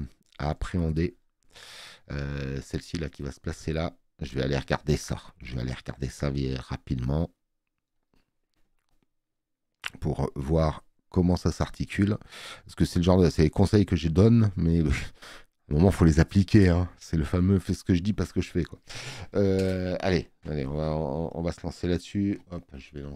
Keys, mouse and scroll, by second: 4.5 space, 4.7 click.